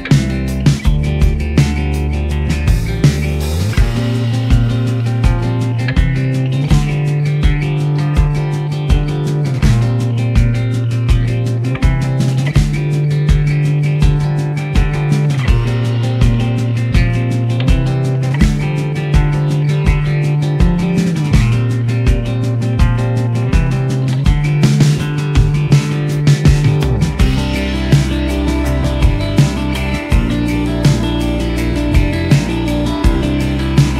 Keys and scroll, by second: 1.9 shift+a, 3.1 shift+a, 5.2-7.6 typing, 8.7 r, 9.2 9, 9.3 0, 9.9 s, 10.9 g, 11.3 s, 12.3 g, 14.1 g, 14.4 s, 14.7 y, 15.8 s, 15.9 x, 17.5 g, 29.0 shift+a, 30.1 typing, 30.4 Return, 31.8 typing.